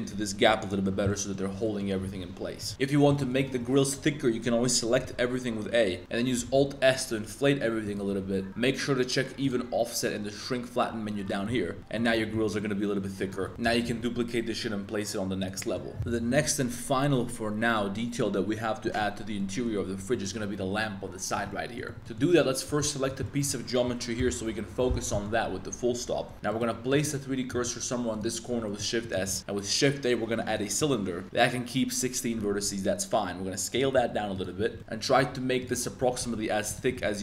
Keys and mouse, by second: 0.6 click, 1.0 click, 1.6 click, 2.0 s, 2.1 shift+x, 2.5 shift+click, 2.7 3, 3.2 shift+click, 4.8 a, 5.0 a, 6.0 alt+s, 6.5 alt+s, 7.8 shift+click, 9.4 click, 11.7 Tab, 11.9 drag, 12.1 shift+click, 12.3 a, 12.5-12.9 middle drag, 13.2 click, 13.4 shift+click, 13.5 shift+x, 13.6 shift+d, 13.7 click, 13.8 g, 14.0 z, 15.4 click, 15.5 click, 15.9 shift+click, 19.3 ctrl+drag, 20.1 ctrl+click, 21.4-21.8 ctrl+drag, 21.8 click, 21.9 middle click, 22.0 a, 22.1 middle click, 22.6 b, 23.2 middle click, 24.1 KP_Decimal, 25.1 middle click, 26.2 Tab, 26.3 2, 26.4 click, 26.9 click, 27.7 shift+s, 28.6 Tab, 28.6 middle click, 29.0 middle drag, 29.4 shift+a, 32.4 Tab, 32.5 s, 33.7 click, 33.9 s, 34.3 click, 34.7 Tab, 35.0 Tab, 35.2-37.2 typing, 35.7 Tab, 36.6 click.